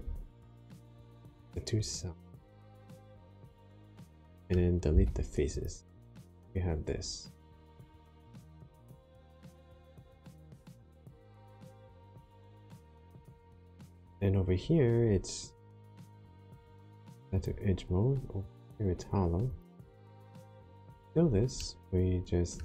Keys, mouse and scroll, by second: 2.2 click, 2.6 middle click, 4.8 x, 5.9 middle click, 15.5 click, 17.3 click, 18.3 click, 19.4 click, 19.9 click, 20.4 click, 21.5 middle click.